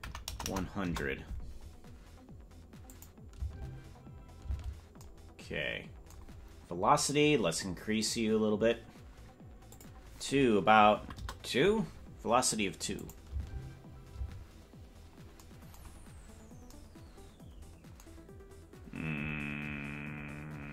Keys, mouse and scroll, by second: 0.4 KP_0, 2.9 click, 3.3 space, 4.5 space, 8.0 click, 9.7-11.7 drag, 13.0 click, 13.3 space, 14.2 space, 16.0-16.7 scroll down 5.